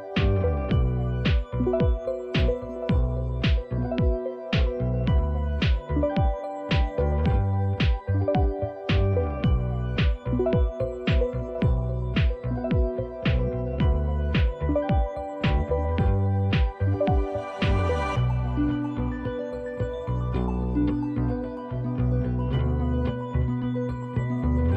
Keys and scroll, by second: 2.1 alt+Tab, 5.1 typing, 7.2-8.4 typing, 9.7 typing, 11.1-11.9 typing, 15.4-16.2 typing, 17.3-23.7 typing.